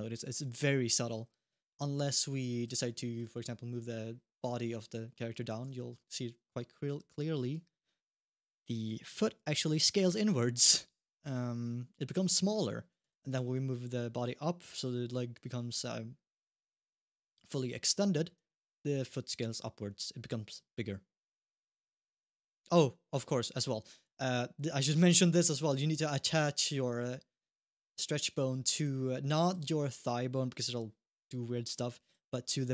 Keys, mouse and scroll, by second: 1.2 middle click, 1.8 middle click, 2.3 click, 2.8 middle click, 3.5-3.9 scroll down 1, 3.9 scroll up 1, 4.6 scroll up 1, 4.9 middle click, 5.5 shift+middle click, 5.9-6.8 scroll down 1, 7.3 click, 8.5 scroll up 1, 8.9 shift+middle click, 9.6 middle click, 9.9-10.3 scroll up 1, 10.3 scroll down 1, 11.0 click, 12.6 scroll down 1, 12.9 alt+g, 13.2 shift+middle click, 14.0 click, 18.1 click, 22.8-23.2 scroll down 2, 23.7-24.9 scroll up 1, 25.0 shift+middle click, 25.5 click, 27.8 scroll down 1, 28.5 click, 29.2 click, 31.8 click.